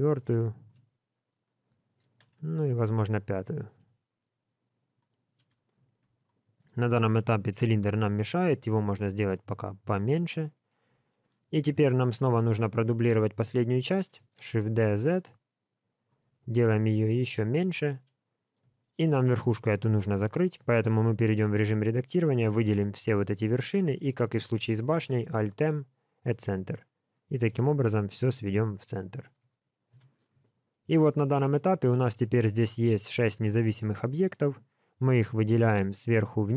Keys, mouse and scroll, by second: 2.0 shift+d, 3.7 s, 5.2 scroll up 2, 6.0 click, 7.4 Tab, 8.5 g, 10.4 scroll up 4, 11.1 shift+middle click, 11.8 Tab, 12.1 click, 14.2 shift+d, 16.2 s, 17.9 middle click, 18.8 shift+middle click, 19.0 scroll up 3, 19.8-20.6 scroll up 4, 20.6 Tab, 21.5 alt+click, 25.3 alt+m, 27.1 scroll down 1, 27.6 alt+a, 28.0 scroll down 3, 28.5 Tab, 29.2 alt+a, 29.8 KP_1, 30.5 scroll down 5, 31.0 shift+middle click, 31.6 scroll down 1, 32.1 shift+middle click, 33.3 scroll down 1, 34.6 scroll down 1, 34.7 click, 35.2 shift+click, 35.5 shift+click, 35.9 click, 36.3 click.